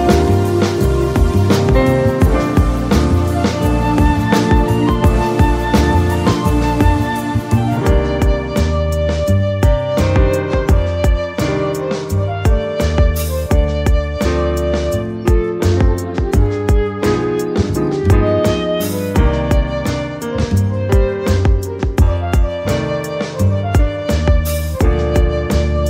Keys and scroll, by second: 0.1 a, 1.3-4.3 typing, 12.3 u, 13.4 m, 14.7 d, 14.8 e, 16.6 ctrl+a, 24.8 ctrl+x.